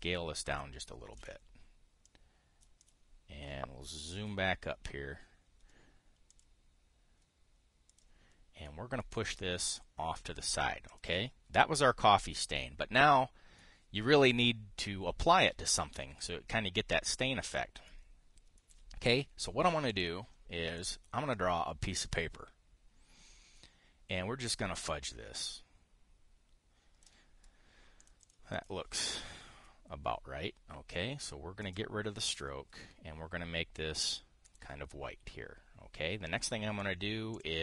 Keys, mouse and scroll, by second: 1.9 ctrl+shift+click, 2.8 click, 3.5 click, 4.9 KP_5, 7.0 click, 8.6 click, 9.3-9.8 drag, 10.4 click, 11.6 click, 20.6 click, 21.5-27.8 drag, 28.7 click, 29.2 click, 32.3 click, 33.0 click, 34.6 click, 35.2 click.